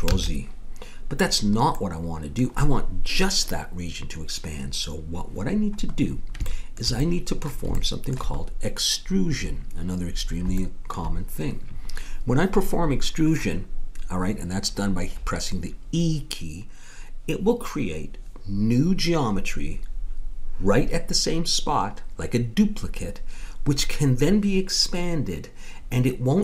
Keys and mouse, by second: 0.1 ctrl+z, 7.1-26.4 middle drag.